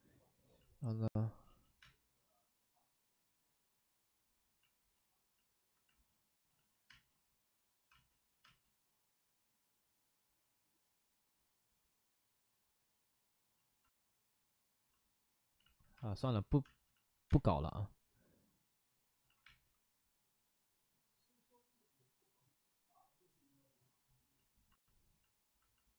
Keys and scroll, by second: 1.4 space, 6.4 ctrl+z, 6.8 space, 7.6 space, 7.8 space, 8.4 space, 12.3 space, 15.5 ctrl+z, 16.2 ctrl+z, 16.2 space, 16.6 space, 16.8 ctrl+z, 17.3 space, 19.2 ctrl+z, 19.4 space.